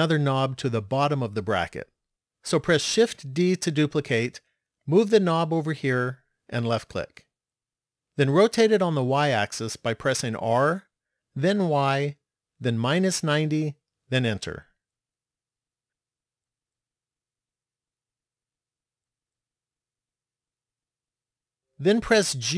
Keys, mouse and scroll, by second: 3.1 shift+d, 9.8 r, 16.1 shift+middle click, 18.2-18.9 scroll up 3, 19.2-20.6 scroll up 2.